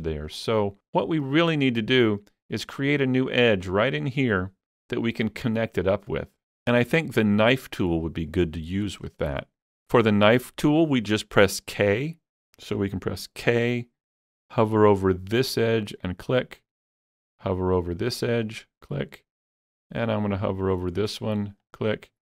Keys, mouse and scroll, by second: 0.4 shift+click, 7.7-9.1 middle drag, 7.7 shift+click, 9.1-11.4 shift+middle drag, 15.6 shift+middle click, 15.6 k, 16.1 click, 18.5 click, 21.7 click.